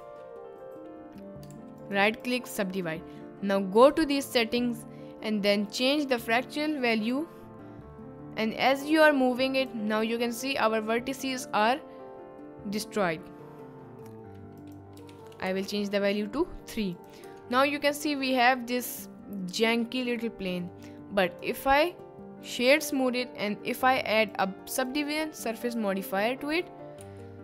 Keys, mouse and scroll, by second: 0.0 ctrl+z, 1.5 ctrl+z, 1.8 click, 3.9 click, 7.2-9.8 drag, 10.2-10.6 middle drag, 13.1 middle click, 14.7 click, 17.3 Tab, 17.6-19.6 middle drag, 19.7-20.1 middle drag, 20.6 middle click, 21.4-23.2 right drag, 24.9-27.4 right drag.